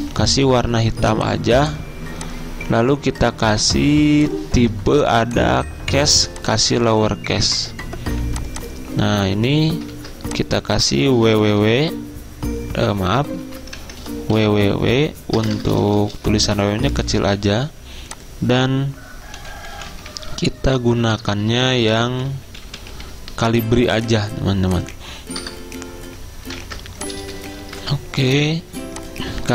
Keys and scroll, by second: 0.0 d, 9.1 t, 10.0 ctrl+z, 11.3-11.7 typing, 13.5 ctrl+z, 13.8 Caps_Lock, 14.2-16.4 typing, 19.5-21.4 typing, 25.2-26.0 typing, 26.7 ctrl+a, 27.6-29.5 typing.